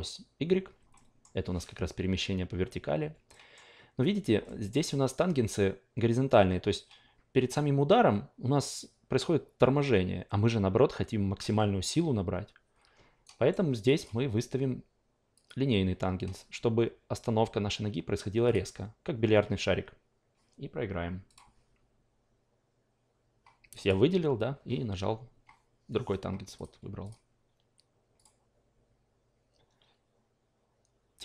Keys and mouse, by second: 0.9 alt+middle click, 3.3-12.9 alt+middle drag, 13.2 alt+right click, 13.9 click, 15.3 click, 18.4 click, 21.3 click, 23.7 click, 26.5 click, 27.0 click, 28.1 click.